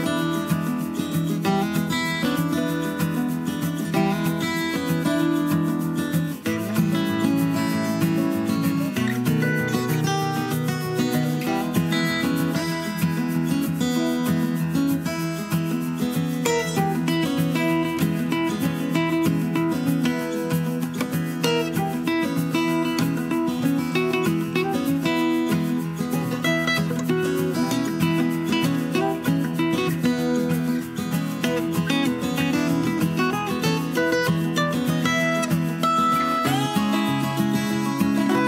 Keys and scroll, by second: 3.2 super+d, 26.4 BackSpace, 26.5 BackSpace, 26.7 BackSpace, 26.9 BackSpace.